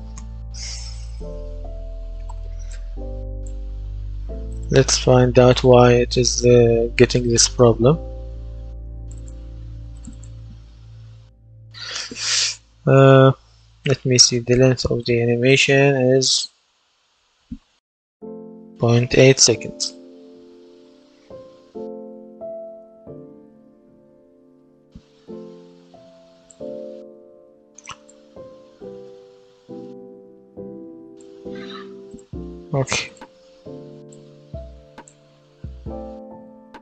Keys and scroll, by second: 1.4 KP_0, 1.6 KP_Decimal, 1.9 KP_1, 2.1 Return, 35.2 w, 35.5 space.